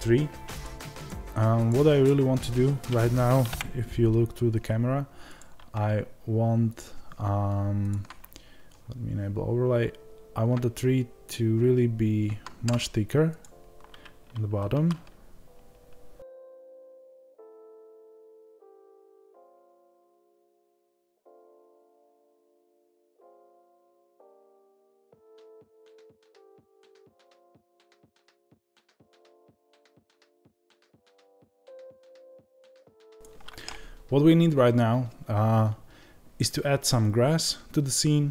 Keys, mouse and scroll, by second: 4.2-5.3 scroll down 2, 5.3 click, 14.6 ctrl+a, 16.6 click, 17.0 ctrl+a, 19.5 ctrl+a, 20.0 click, 20.2 Tab, 20.5-24.2 middle drag, 20.7 scroll up 2, 21.5 g, 23.1 KP_0, 24.2 shift+click, 24.6 g, 25.6-26.8 middle drag, 25.9-26.4 scroll up 2, 26.4 g, 26.8 click, 27.2-28.3 middle drag, 27.7 scroll down 2, 27.9 KP_0, 28.3 click, 28.5 Tab, 30.6-38.3 middle drag, 31.3 scroll up 2.